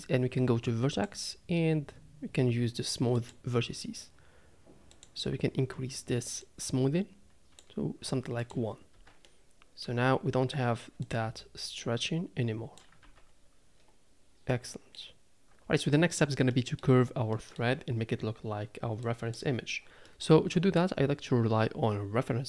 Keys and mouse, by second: 1.1-3.3 drag, 5.0 click, 6.4-7.6 drag, 8.1 z, 8.9 Tab, 9.2-9.8 drag, 9.8 Tab, 11.8-12.8 drag, 13.0 Tab, 14.5-14.9 middle drag, 16.5 middle drag, 17.3 middle drag, 19.0 click, 20.0 middle click.